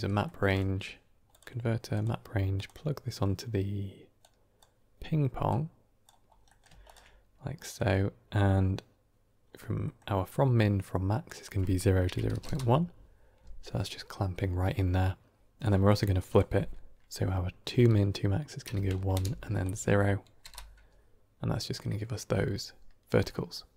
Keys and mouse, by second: 0.1 middle click, 0.4 shift+a, 4.2 click, 5.4-5.9 drag, 6.3 middle click, 7.6 middle click, 9.7 middle click, 11.1-12.9 drag, 16.3-20.7 drag, 23.5 middle click.